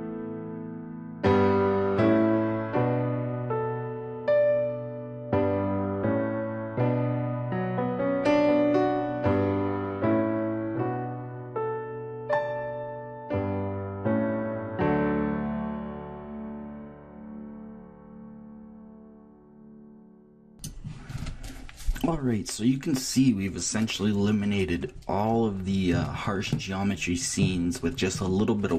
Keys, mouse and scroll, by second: 0.4 click, 0.9 click, 2.2 click, 2.8 click, 3.5 click, 3.9 click, 4.6-6.1 drag, 6.3 middle click, 6.7 click, 7.2 middle click, 7.6 click, 8.1 click, 8.4 middle click, 8.7 click, 9.5 click, 10.2 click, 11.1 click, 11.3 click, 11.8 click, 12.3 click, 12.5 middle click, 12.9 click, 13.2 click, 13.9 click, 14.5 click, 15.3 click, 15.6 click, 16.2 click, 16.7-18.1 drag, 18.2 click, 18.5 middle click, 18.7 middle click, 19.2 middle click, 19.5 Left, 20.3 Left.